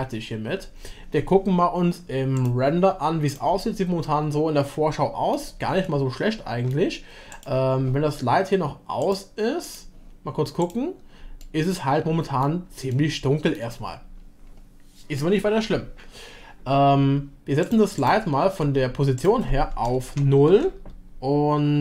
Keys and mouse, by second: 4.0-5.4 middle drag, 5.8-7.3 shift+middle drag, 9.0-11.5 drag, 11.5-12.7 middle drag, 12.9-13.7 shift+middle drag, 17.7 click, 18.0 click, 19.3-21.8 drag.